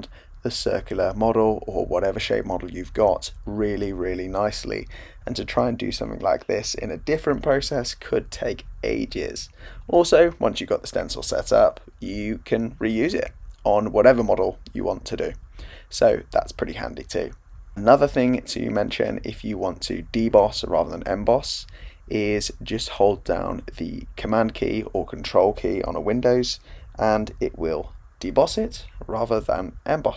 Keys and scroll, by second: 6.1 super+z, 10.5 super+z, 27.6 super+z.